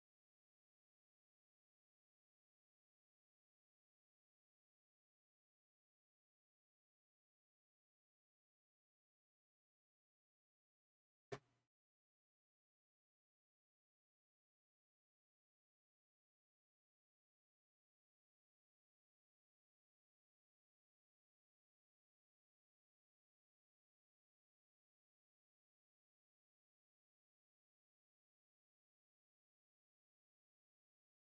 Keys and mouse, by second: 1.9-3.0 drag, 3.0 g, 7.9 g, 10.3 g, 15.4 g, 18.7-20.1 drag, 20.1 g, 24.2 g, 26.9 g, 28.5-29.9 drag, 30.4 g.